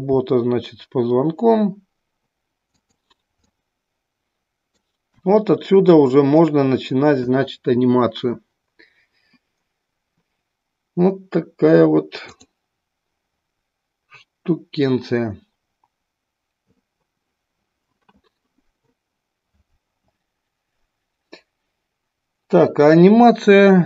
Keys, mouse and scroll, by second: 2.8 click, 3.5-4.9 middle drag.